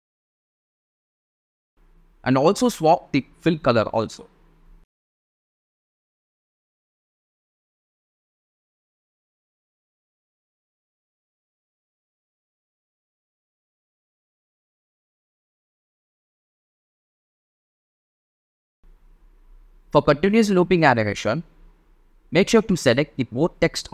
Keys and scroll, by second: 4.8 space, 13.8 space, 16.6 space, 21.2 space.